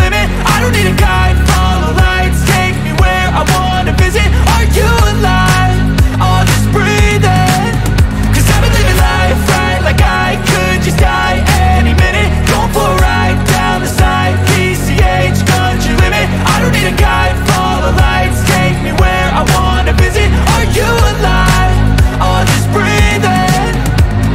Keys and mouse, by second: 3.9 click, 9.7 F12, 16.2 ctrl+shift+f, 17.3 click, 17.7 click, 18.1 click, 18.4 click, 18.6 click, 19.0 click, 19.6 click, 20.0 click, 20.3 click, 20.7 click, 20.9-22.5 typing, 21.1 click, 21.8 click, 23.0 click, 23.5 click, 23.7 ctrl+z, 24.1 click.